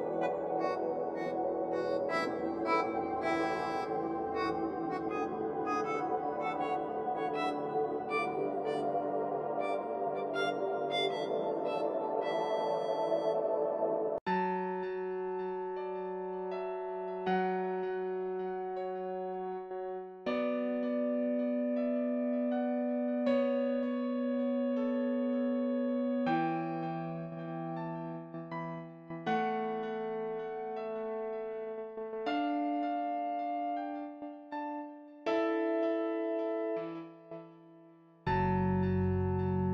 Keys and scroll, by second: 4.5 0, 5.2 ., 5.6 5, 20.4 5, 22.0 5, 39.3 ctrl+t.